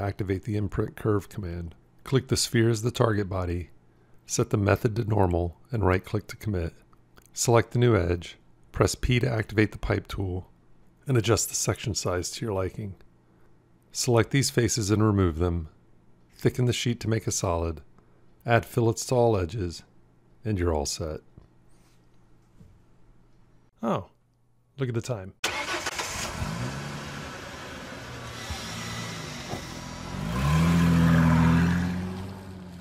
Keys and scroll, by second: 8.7 p, 15.6 shift+x.